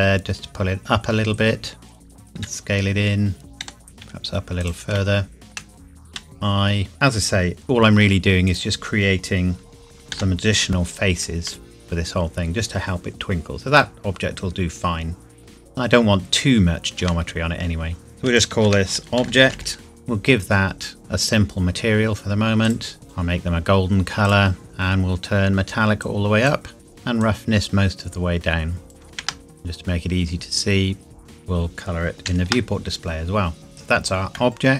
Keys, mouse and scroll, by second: 1.9 click, 2.4 s, 3.5 click, 3.6 g, 4.0 z, 4.6 click, 5.0 shift+middle click, 6.1 i, 6.9 click, 7.6 z, 8.5 click, 10.1 g, 10.7 click, 11.5 middle click, 16.0 scroll down 1, 17.0 Tab, 18.0 click, 18.5-19.7 typing, 20.2 Return, 21.0 click, 26.0 click, 29.1 ctrl+c, 29.5-31.6 scroll down 2, 32.3 ctrl+v, 33.1-33.7 scroll down 2, 33.7 shift+middle click.